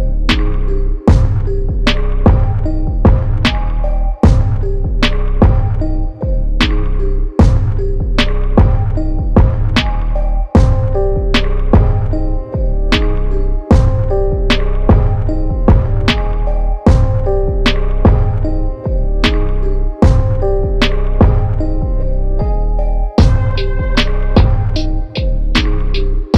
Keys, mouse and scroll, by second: 0.6 e, 1.9 e, 2.5 e, 3.5 click, 4.9-5.2 scroll up 2, 5.2 shift+middle click, 5.7 click, 6.3-7.3 scroll up 2, 6.6 shift+middle click, 7.3 click, 8.3 s, 9.6 click, 10.5 g, 11.7-12.1 scroll down 1, 12.1 shift+middle click, 12.3 scroll down 1, 12.6 shift+middle click, 13.4 click, 14.0 middle click, 14.5 click, 15.2 click, 18.8 ctrl+z, 19.1 middle click, 19.5 e, 23.9 click, 24.3-25.3 drag, 26.1 e.